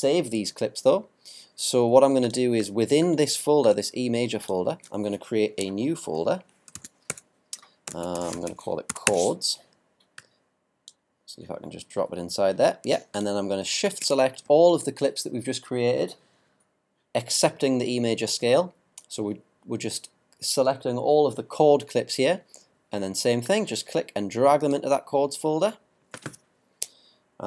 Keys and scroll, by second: 6.7-8.6 typing.